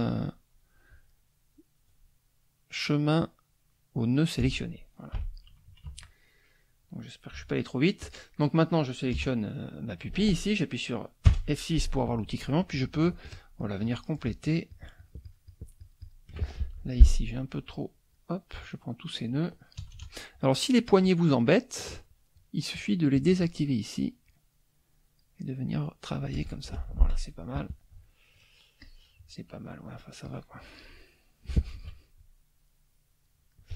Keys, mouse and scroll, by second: 4.4 F1, 5.1 Delete, 5.7 KP_Subtract, 6.6 click, 6.8 middle click, 8.0 click, 8.3 middle click, 9.1 KP_Add, 9.7 middle click, 12.7-14.1 shift+drag, 14.2-15.8 shift+drag, 17.1 shift+F2, 17.1 shift+click, 17.7 shift+click, 19.8 KP_Add, 20.5 middle click, 23.2 click, 24.3-25.3 drag, 25.3 middle click, 26.4 F1, 26.7 KP_Subtract, 28.8 click, 29.1 middle click, 30.3 click, 31.7 shift+click, 32.2-33.4 shift+drag, 33.5 middle click.